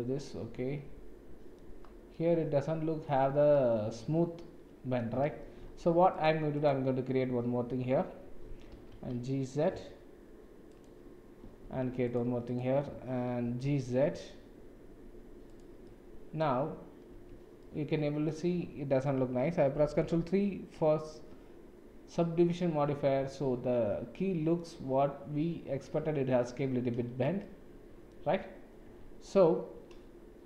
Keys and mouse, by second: 0.0-1.6 middle drag, 2.1-3.1 middle drag, 3.3 Tab, 3.5-5.0 middle drag, 5.6 ctrl+r, 11.4 g, 11.6 ctrl+r, 13.4 g, 15.9 middle click, 17.1 Tab, 17.6-18.1 middle drag, 18.4-19.1 middle drag, 20.0 ctrl+3, 20.7-24.5 middle drag, 24.9-27.3 middle drag, 27.4 middle click, 28.9 Tab.